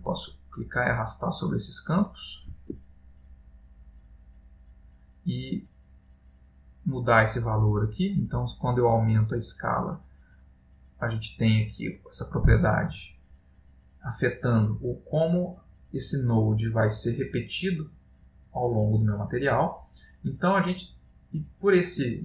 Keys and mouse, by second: 0.5 click, 3.8 click, 14.8 middle click, 16.2 click, 18.7 middle click, 19.5 ctrl+middle click.